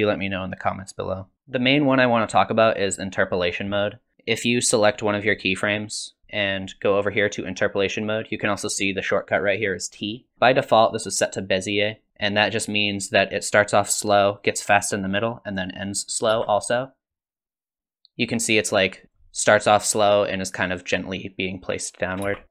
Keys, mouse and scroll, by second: 1.3 click, 5.2 click, 6.3 click, 16.3 space, 19.0 click, 22.2 space, 22.4 click.